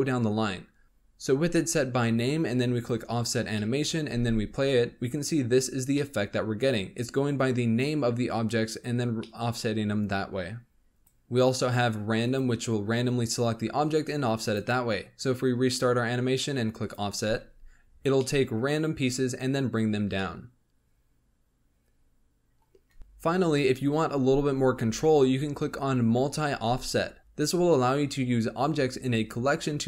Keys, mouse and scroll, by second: 0.8-2.7 middle drag, 2.7-3.5 drag, 3.5-4.0 middle drag, 4.0 space, 5.9-8.9 middle drag, 9.2-11.0 middle drag, 11.0-17.2 drag, 17.2 space, 18.1-22.9 middle drag, 22.9 space, 23.0 click.